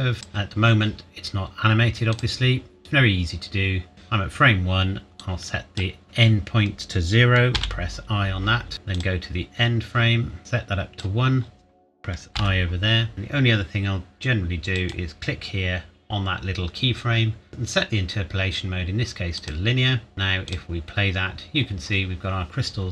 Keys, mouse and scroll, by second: 5.3 click, 7.5 i, 8.9 click, 12.3 i, 14.7 i, 17.0 right click, 19.3 click, 20.1-20.4 scroll down 1, 20.4 click.